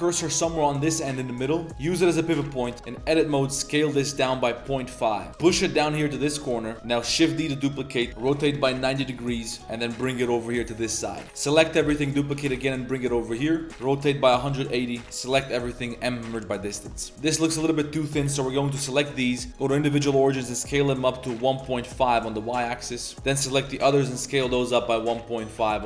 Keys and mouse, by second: 0.6 Tab, 1.7 click, 2.4 Tab, 2.7 z, 2.7 a, 3.3 s, 5.3 g, 6.5 shift+click, 6.7 z, 7.0 shift+d, 7.9 click, 8.1 r, 9.1 click, 9.6 g, 10.3 click, 10.9 click, 11.2 click, 11.2 a, 11.9 shift+d, 12.3 g, 13.4 click, 13.7 r, 15.0 a, 15.3 m, 16.5 click, 16.7 Tab, 16.9 click, 17.3 click, 17.5 a, 17.7 a, 18.2 l, 18.7 l, 19.8 s, 22.8 click, 23.0 Tab, 23.1 l, 23.6 s.